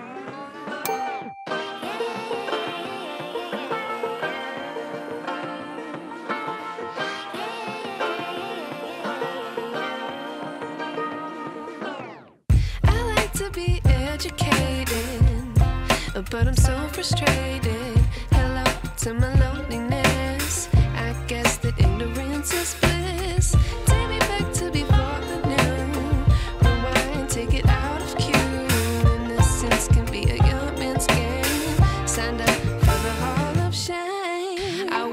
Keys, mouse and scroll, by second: 1.3-2.2 scroll up 8, 2.2-2.8 scroll down 4, 3.2-3.5 scroll down 3, 6.0 click, 7.0 KP_1, 7.5 scroll up 4, 8.1 a, 9.3-9.6 scroll up 4, 9.9-11.3 shift+middle drag, 11.3 click, 11.8 scroll up 3, 12.2 scroll down 1, 13.4-13.7 scroll down 2, 17.6 KP_1, 19.0 a, 19.8 s, 22.0 scroll up 4, 22.8-23.7 scroll down 4, 26.1 Tab, 26.5 Tab, 27.1 scroll up 2, 27.9-28.5 scroll down 2, 30.0 click, 31.5 Tab, 31.5 click, 33.9 click, 34.4 Tab.